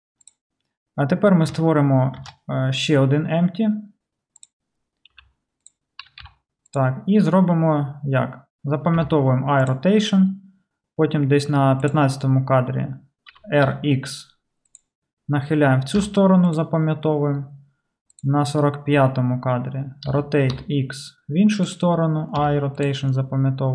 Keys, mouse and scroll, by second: 2.2 shift+a, 5.2 s, 5.8-11.9 middle drag, 6.1 g, 9.0 i, 11.9-14.8 drag, 13.3 r, 14.8-18.2 middle drag, 16.0 r, 16.0 i, 18.1-21.8 drag, 20.1 r, 21.8-23.7 middle drag, 22.4 r, 22.6 i.